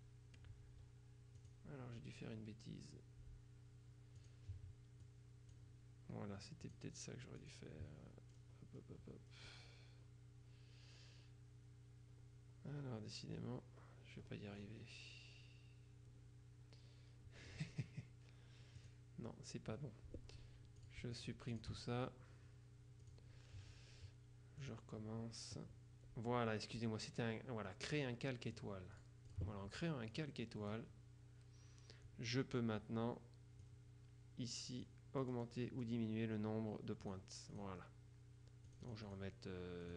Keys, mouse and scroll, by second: 4.3 click, 5.1-5.7 scroll down 2, 5.7-6.1 scroll down 1, 6.7 click, 7.5 click, 8.4-10.5 scroll down 2, 11.3-11.8 scroll up 2, 12.2-12.7 scroll up 2, 12.9-13.3 scroll up 2, 13.3 scroll down 2, 13.5-15.3 scroll up 2, 18.9 click, 20.9-22.4 shift+drag, 21.9 shift+right click, 23.1 click, 24.7 click, 28.7-29.9 drag, 30.2 click, 33.7-35.3 drag, 35.3-36.4 scroll down 1, 37.1 click, 38.7 click, 39.9 click.